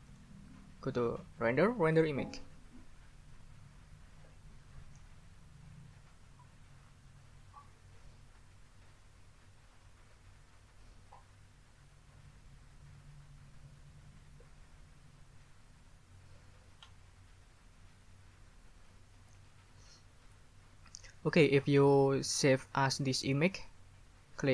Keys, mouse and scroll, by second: 0.1 click, 1.9 click.